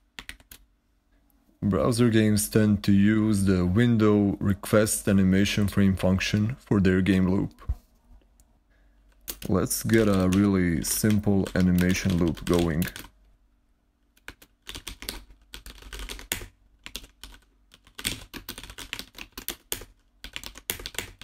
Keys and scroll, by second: 0.7 ctrl+Right, 8.9-13.0 typing, 9.2 Return, 14.3-21.2 typing.